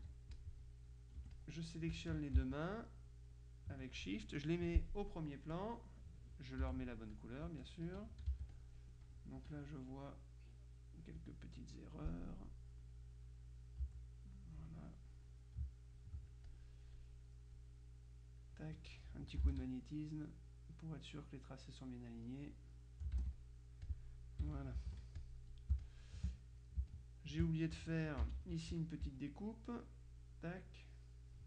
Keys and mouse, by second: 0.1 ctrl+z, 0.5 ctrl+click, 1.3 F1, 1.5-3.9 drag, 5.6 click, 6.7 F7, 7.2 click, 7.6 F1, 8.4 z, 8.6 click, 9.5 F2, 10.0 click, 11.1 click, 12.4-13.5 drag, 13.9 Delete, 13.9 click, 15.2-17.5 drag, 20.2-22.7 drag, 23.4-24.5 shift+drag, 24.5 KP_Subtract, 25.3 click, 25.8 space, 26.2 click, 27.0 click, 27.0 space, 28.3 F6, 28.7 F7, 29.2 F6, 29.6-30.7 drag, 30.8-31.4 drag.